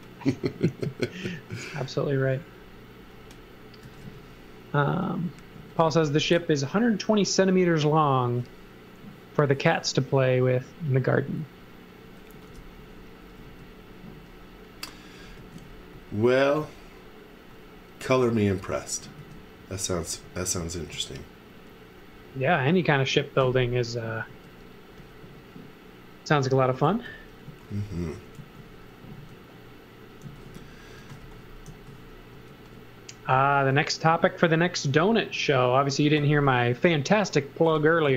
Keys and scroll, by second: 3.6-6.9 typing, 12.0-13.4 typing, 15.3 x, 15.9 v, 18.0 x, 18.2 v, 19.2 s, 24.2 space, 25.2 x, 26.2-29.1 typing, 30.2-32.3 typing, 33.6 space.